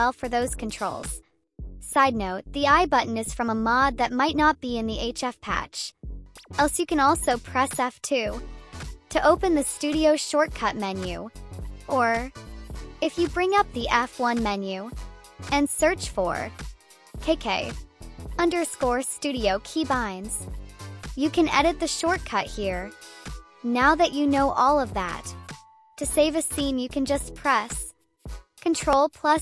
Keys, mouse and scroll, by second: 0.2 click, 1.8-3.4 drag, 4.1-5.5 drag, 6.3 click, 7.2 F2, 11.2 F2, 12.4 F1, 17.5 click, 28.3 ctrl+s.